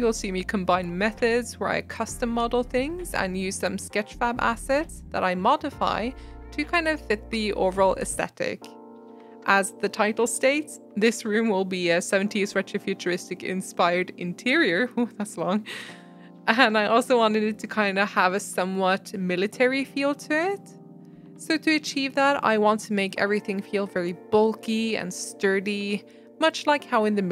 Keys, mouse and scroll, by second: 0.1-0.9 right drag, 0.9 middle click, 1.6 scroll down 1, 1.7 middle click, 2.0 click, 2.1 shift+click, 2.4 shift+click, 2.5 middle click, 2.7 g, 3.2 right click, 3.8 click, 4.3 g, 8.8 scroll up 2, 9.0 shift+middle click, 9.2 Tab, 9.4 click, 9.5 middle click, 9.8 shift+click, 10.0 shift+click, 10.2 shift+click, 10.4 ctrl+b, 15.0 click, 15.2 shift+click, 15.6 shift+click, 15.7 s, 16.8 scroll down 2, 16.8 middle click, 17.1 Tab, 17.2-18.1 middle drag, 18.2-18.9 shift+middle drag, 18.9 Tab, 20.1 click, 20.7-21.9 drag, 22.5 click, 23.6 shift+click, 23.8 shift+click, 24.0 middle click, 24.8 e, 26.7 middle click.